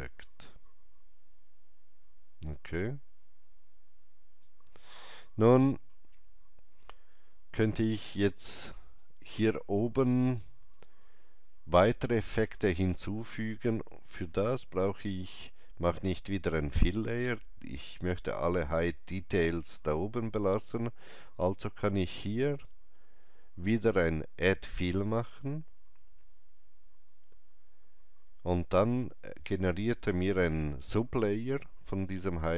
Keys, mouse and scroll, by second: 0.5-8.2 alt+drag, 5.4 shift+middle click, 8.8-11.4 alt+drag, 8.8 shift+middle click, 22.5 click, 22.5 shift+middle click, 25.0 click.